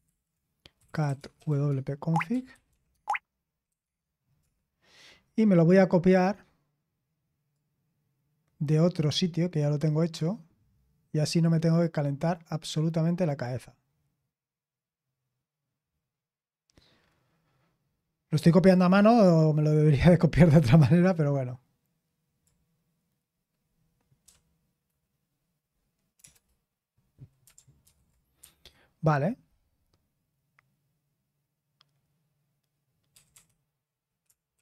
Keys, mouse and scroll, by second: 0.0 super+h, 0.5-4.8 typing, 2.3 Tab, 5.9 typing, 7.5-22.5 drag, 24.2 o, 27.8 ctrl+v, 28.4 Escape, 33.1-34.6 typing.